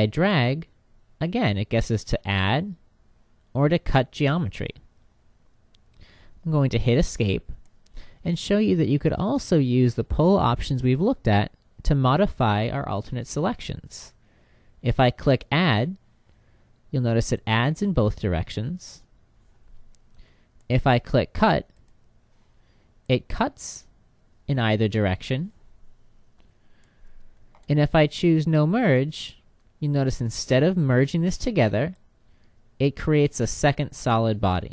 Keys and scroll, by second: 6.6 Escape, 19.6 Escape, 25.8 Escape.